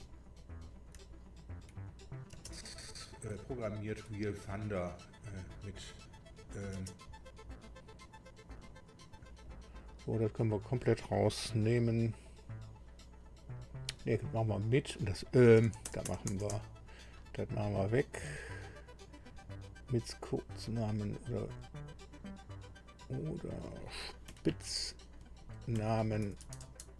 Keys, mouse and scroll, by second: 1.1-1.5 shift+scroll down 2, 2.0 shift+click, 3.6 shift+scroll down 2, 4.2-6.8 shift+scroll down 3, 8.5 click, 9.4 click, 14.6 click, 15.7 BackSpace, 15.9 BackSpace, 16.4 BackSpace, 18.3 click, 22.7 click, 24.3 Delete, 25.2 Left, 25.7 Left, 26.1 Right, 26.4 BackSpace, 26.6 BackSpace, 26.7 BackSpace.